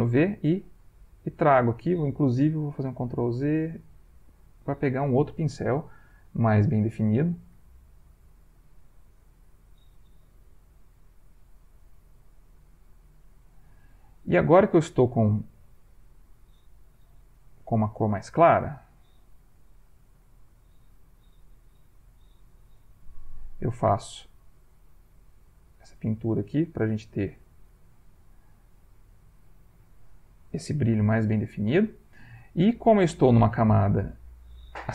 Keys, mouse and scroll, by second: 2.3 ctrl+z, 4.0-5.6 ctrl+right drag, 6.3 click, 7.5-8.8 shift+drag, 10.2 v, 10.8-12.8 drag, 17.4 ctrl+click, 18.5 shift+click, 20.1 ctrl+v, 21.9 ctrl+z, 22.8 v, 23.3-26.0 drag, 27.7-29.2 drag, 30.0 click, 31.5 click, 32.6 click, 33.8 click.